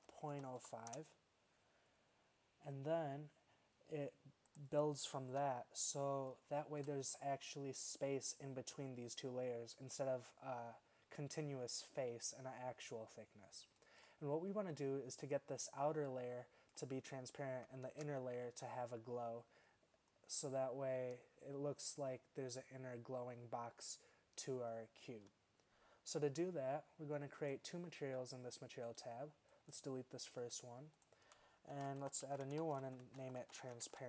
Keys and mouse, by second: 5.3 z, 6.1-6.8 middle drag, 7.1 middle click, 7.8-12.1 middle drag, 12.3-13.0 middle drag, 13.3-13.8 middle drag, 17.9 shift+z, 24.1 middle click.